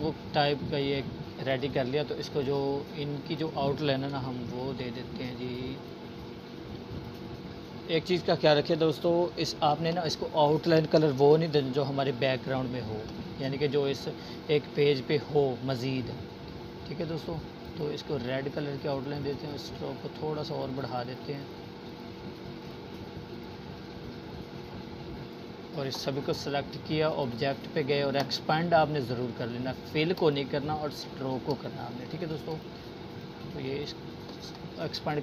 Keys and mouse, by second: 0.6-1.3 click, 12.9-20.9 drag, 32.1 click.